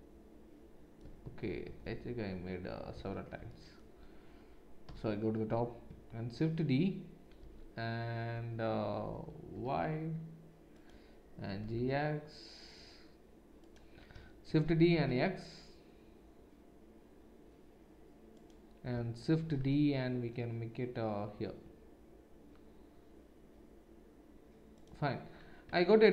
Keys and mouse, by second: 1.2 ctrl+z, 1.6 ctrl+z, 2.9 ctrl+z, 4.8 KP_7, 6.3 shift+d, 11.5 g, 14.5 shift+d, 19.4 shift+d, 25.6 Tab.